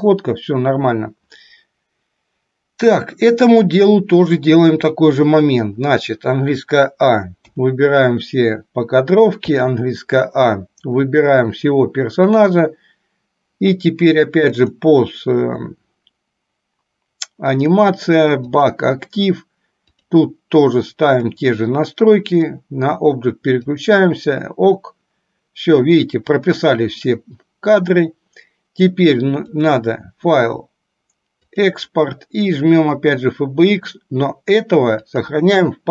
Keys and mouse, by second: 5.7 click, 9.7 a, 12.6-13.7 drag, 14.8 click, 29.6-33.7 drag.